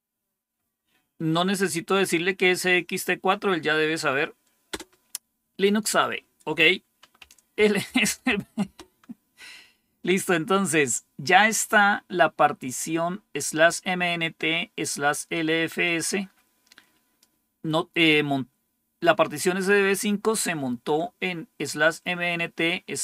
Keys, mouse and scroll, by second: 4.6 Return, 6.9-9.6 typing, 11.6-12.7 drag, 15.8-17.1 drag.